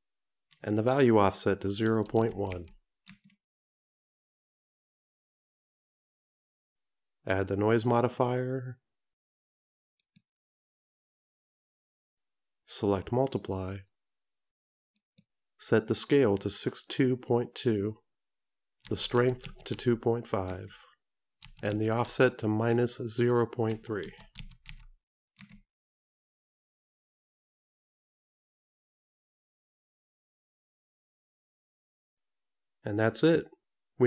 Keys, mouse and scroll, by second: 8.1 click, 13.5 click, 16.7 click.